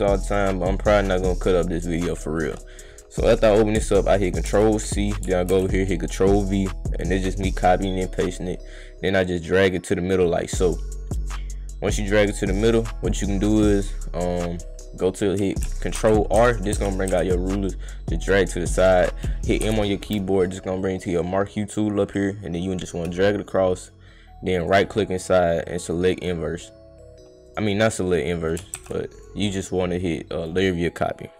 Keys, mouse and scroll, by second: 0.7 click, 0.9 click, 1.5 click, 2.4 right click, 4.5 ctrl+c, 5.1 click, 5.5 ctrl+v, 6.5 click, 6.7 click, 7.6-11.9 drag, 13.0 click, 15.9 ctrl+f, 16.4 ctrl+f, 16.7 ctrl+f, 17.1 ctrl+r, 17.6-18.9 right drag, 20.4 right click, 21.1 click, 21.9-23.9 drag, 24.5 right click, 25.8 right click, 25.8 click, 27.4 right click, 28.4 click, 28.8 ctrl+z, 29.1 right click, 30.4 click.